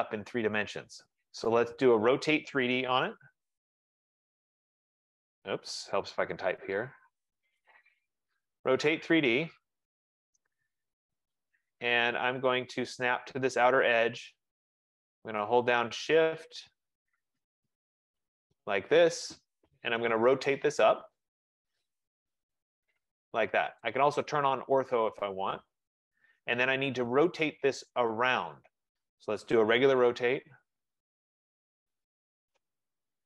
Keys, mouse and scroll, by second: 1.0 right click, 1.6 middle click, 3.1-4.8 typing, 5.9-8.3 typing, 11.2 click, 13.7 click, 18.3 right click, 19.0-19.6 scroll down 2, 19.6-20.6 scroll up 2, 20.6-20.9 scroll up 2, 22.7 shift+click, 23.9 shift+click, 25.3 middle click, 26.3 middle click, 30.1-32.8 typing.